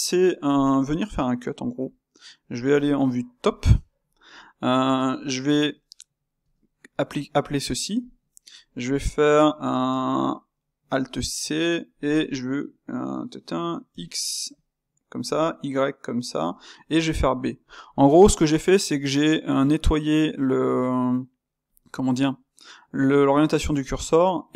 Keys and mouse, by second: 2.7 KP_7, 3.5-8.1 ctrl+shift+middle drag, 8.1 space.